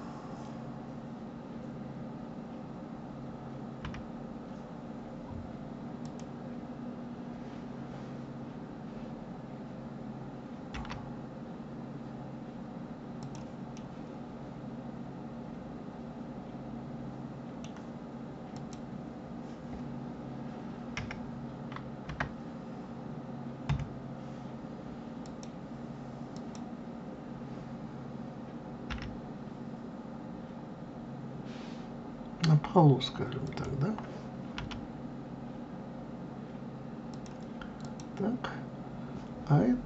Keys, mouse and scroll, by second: 3.8 KP_3, 6.0 click, 10.7 g, 13.7-16.8 middle drag, 18.5 click, 20.9 KP_1, 21.9 KP_Enter, 23.6 KP_3, 25.1 click, 26.3 click, 28.8 g, 34.5 r, 37.8 click.